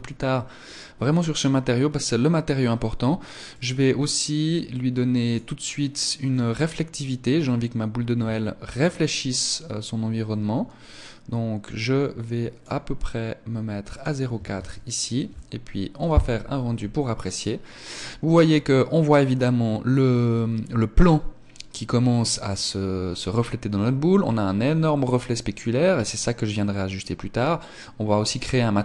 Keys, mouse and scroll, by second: 1.3-2.9 scroll down 2, 3.5 click, 5.1 click, 13.9 click, 14.5 ctrl+s.